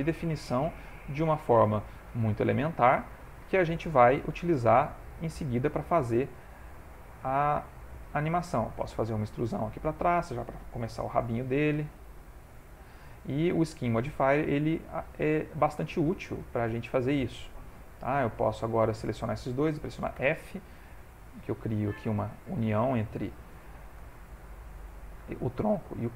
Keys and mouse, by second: 1.7 ctrl+middle click, 2.3 middle click, 3.5 shift+middle click, 4.8 middle click, 5.3 middle click, 5.8 ctrl+middle click, 7.2 ctrl+middle click, 7.2 click, 7.5 ctrl+middle click, 7.6 ctrl+middle click, 7.7 shift+middle click, 8.5 e, 11.0 ctrl+a, 12.9 middle click, 14.6 shift+middle click, 15.0 middle click, 15.8 shift+middle click, 16.5 ctrl+middle click, 16.8 shift+middle click, 17.4 middle click, 18.4 click, 18.9 shift+click, 19.4 middle click, 20.2 f, 20.8 ctrl+middle click, 21.7 middle click, 22.9 shift+middle click, 23.4 ctrl+middle click.